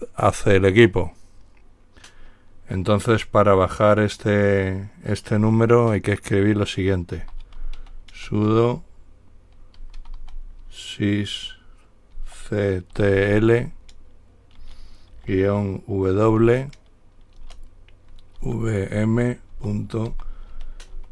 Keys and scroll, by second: 7.3-8.5 typing, 9.8-10.9 typing, 12.4-13.5 typing, 15.4 typing, 16.5 typing, 18.6-21.1 typing.